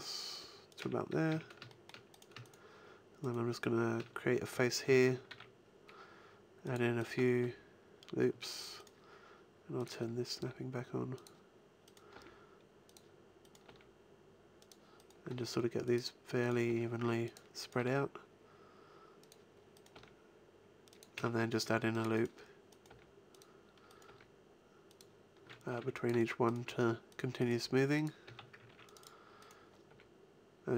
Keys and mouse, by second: 0.8 click, 1.3 a, 4.5 f, 4.9 a, 5.3 ctrl+r, 7.4 g, 10.3 g, 11.1 click, 12.1 g, 13.7 g, 15.3 g, 16.7 g, 17.7 g, 19.5 click, 19.9 g, 20.9 click, 21.1 a, 21.6 ctrl+r, 22.9 g, 24.1 g, 25.7 ctrl+r, 26.6 g, 27.6 g, 28.2 a, 28.7 ctrl+r, 29.9 g.